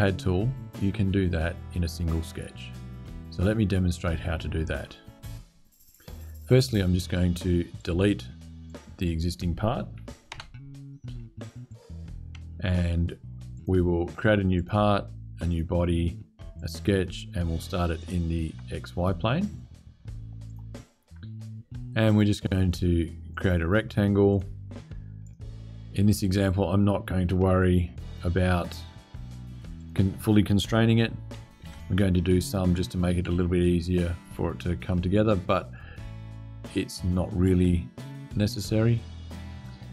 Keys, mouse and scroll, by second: 7.2-7.5 scroll down 1, 7.5 click, 8.4 click, 10.1 Delete, 11.4 click, 13.3 click, 14.3 click, 15.2 click, 16.3 click, 17.7 click, 20.2 click, 21.9 click, 23.0 click, 24.0 click, 24.9 right click, 26.1 click, 27.1-27.8 scroll down 2, 27.8 click, 29.5 click, 31.3 s, 38.0 click.